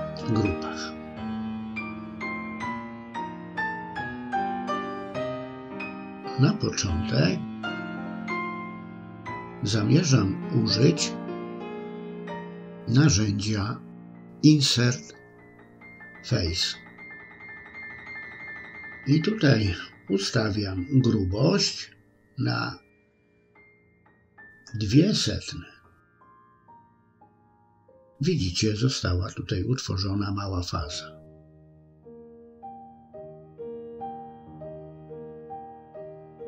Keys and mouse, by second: 0.0 middle click, 1.1 shift+middle click, 1.8-2.9 middle drag, 13.6 i, 18.6-27.0 drag, 29.5-31.9 middle drag, 33.6-35.5 middle drag, 36.1 middle click.